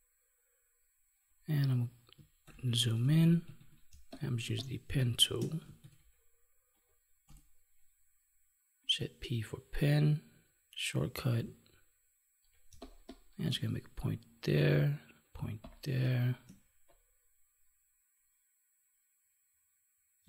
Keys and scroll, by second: 2.4 ctrl+=, 4.3 space, 12.6 space, 15.3 space, 20.1 space.